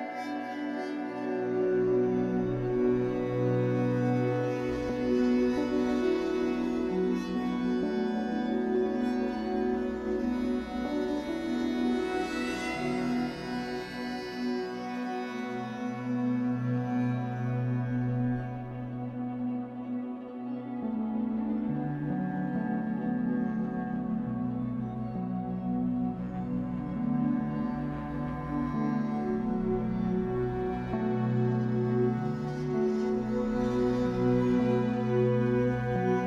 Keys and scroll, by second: 10.2 ctrl+g.